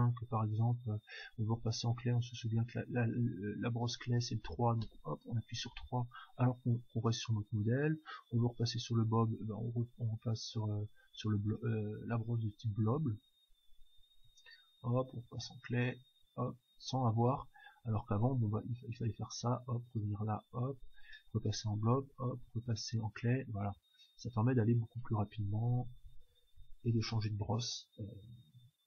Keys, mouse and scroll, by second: 0.0-1.9 drag, 4.8 3, 5.4-6.4 middle drag, 6.4-10.9 drag, 8.4 1, 11.5-13.2 drag, 15.4 3, 15.8-17.5 drag, 19.2-24.9 drag, 24.9-26.8 typing.